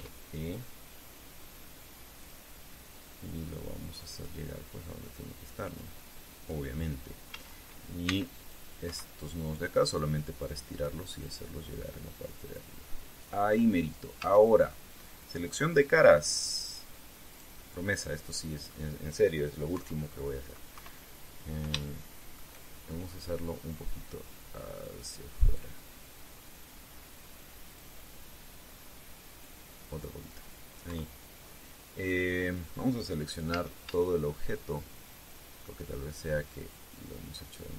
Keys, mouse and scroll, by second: 0.6 e, 3.0 click, 4.1-5.2 drag, 6.5 click, 8.0 a, 8.8 c, 9.1 click, 9.6 Escape, 10.2-11.8 drag, 12.4-14.1 drag, 14.9 a, 17.2 click, 18.0 right click, 18.7 middle click, 20.4 KP_3, 21.5 KP_1, 22.5 shift+middle click, 24.2-28.7 drag, 30.2 click, 31.6 KP_3, 34.2 a, 35.3-36.6 drag, 37.4-37.7 drag.